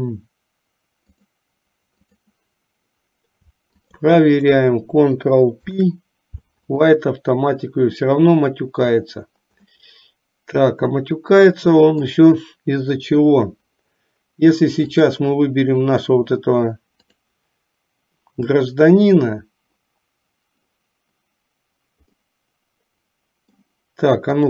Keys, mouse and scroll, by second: 1.1-2.4 drag, 5.7 ctrl+p, 9.9-12.3 middle drag, 14.9 click, 17.0 click, 22.4-23.8 middle drag.